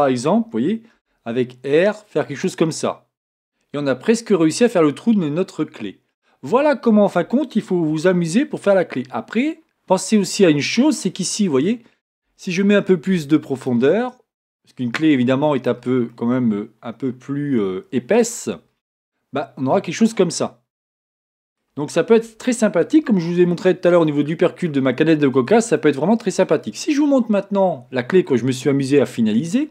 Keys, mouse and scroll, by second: 1.1 r, 6.2 scroll down 1, 6.7 scroll up 1, 7.0 scroll down 1, 8.0 shift+click, 8.2-14.1 shift+middle drag, 10.1 scroll down 2, 10.2-11.1 scroll up 2, 11.1-12.7 scroll up 1, 12.7-14.1 scroll up 1, 14.1 scroll up 1, 14.1-16.1 drag, 16.1-29.7 middle drag, 19.1-19.7 scroll down 2, 21.9 scroll down 1, 24.2-24.6 scroll down 2.